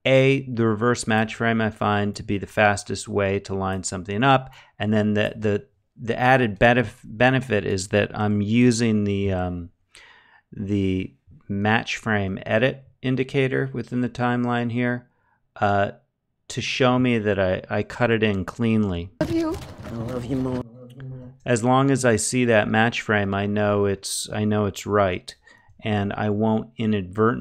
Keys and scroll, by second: 18.7 space, 20.6 space, 24.4 -.